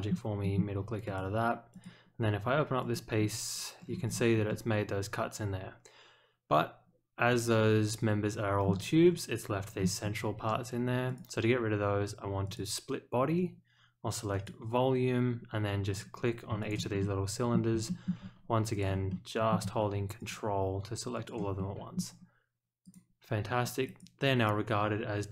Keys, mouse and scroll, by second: 0.4 middle click, 1.0 click, 1.7 click, 2.8 click, 4.4-8.6 middle drag, 9.1 scroll down 1, 9.7-10.1 scroll up 1, 11.0 click, 12.4 click, 14.3 click, 15.8 click, 16.6 ctrl+click, 17.0-17.5 middle drag, 17.8 shift+middle click, 18.7 ctrl+click, 19.1-19.5 middle drag, 20.1 ctrl+click, 21.1 ctrl+click, 21.5-21.9 middle drag, 22.8 click, 23.8 click.